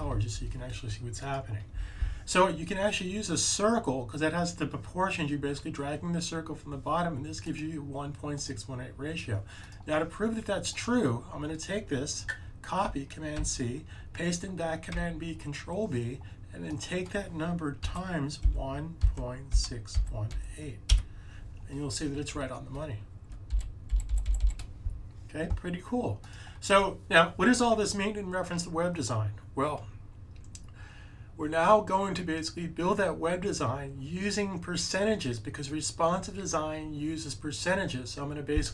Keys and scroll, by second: 13.2 super+c, 14.8 super+b, 17.7-20.7 typing, 23.4 Up, 23.8 Up, 24.0 Up, 24.1 Up, 24.3 Up, 26.9-27.3 typing.